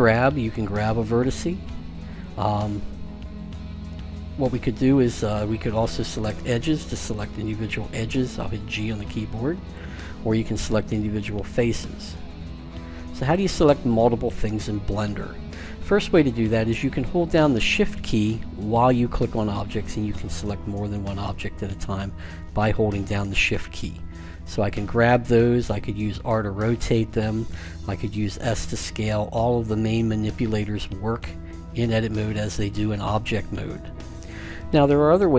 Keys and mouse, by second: 0.0 g, 6.1-8.5 drag, 6.9-8.6 right drag, 8.5 g, 8.6 click, 10.8 click, 11.8 middle click, 12.4 g, 12.5-15.5 drag, 18.7-23.7 right drag, 23.3 g, 26.2 r, 28.2 s.